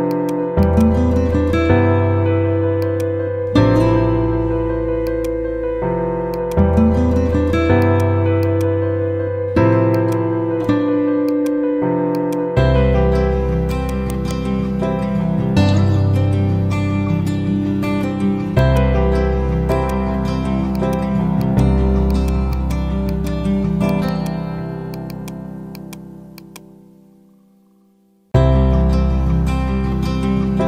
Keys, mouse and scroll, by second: 0.0-0.3 typing, 0.0 click, 5.0 click, 14.0 right click, 18.5-26.2 drag, 26.9 typing, 27.4 Up.